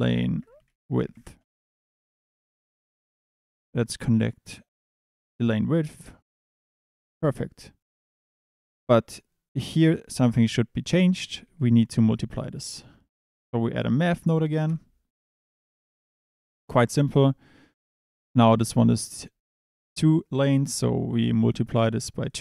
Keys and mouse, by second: 2.6 Tab, 3.2 click, 6.6 click, 6.9 middle click, 7.9 click, 10.5 click, 11.4 shift+a, 18.0 click, 21.5-22.3 drag.